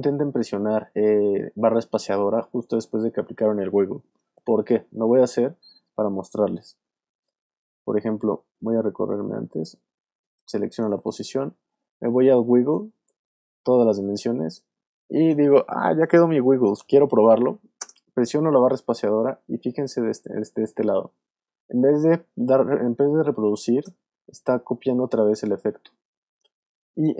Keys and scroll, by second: 5.9 super+z, 17.8 space, 23.7 space.